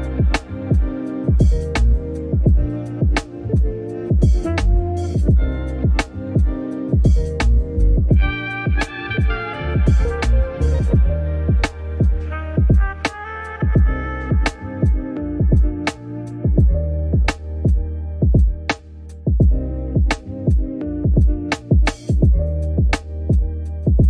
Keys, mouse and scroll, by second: 1.8 click, 2.0 click, 2.8 scroll up 1, 3.1 click, 3.2 ctrl+z, 3.8 click, 5.1 click, 5.8 shift+r, 6.1 shift+r, 6.2 scroll down 4, 6.3 middle click, 6.8 ctrl+KP_Add, 6.9 ctrl+KP_Add, 7.2 ctrl+KP_Add, 7.7 middle click, 8.0 ctrl+r, 9.2 click, 9.3 ctrl+KP_Add, 9.4 ctrl+KP_Add, 9.6 middle click, 9.7 g, 10.7 click, 10.9 g, 11.1 middle click, 11.3 Tab, 11.6-12.1 scroll up 4, 11.6 middle click, 11.8 Tab, 11.9 middle click, 12.1 click, 12.6 click, 12.9 Delete, 13.5 middle click, 13.6-13.9 scroll up 1, 13.9 click, 14.4 click, 14.6 s, 15.5 ctrl+r, 16.1 middle click, 16.2 ctrl+r, 16.5 scroll down 2, 16.7 click, 16.9 g, 17.5 middle click, 17.6 Tab, 17.8 right click, 17.9 scroll down 3, 17.9 middle click, 18.2 click, 18.3 middle click, 18.5 scroll up 3, 18.6 middle click, 18.7 alt+click, 18.8 s, 22.5-23.8 middle drag.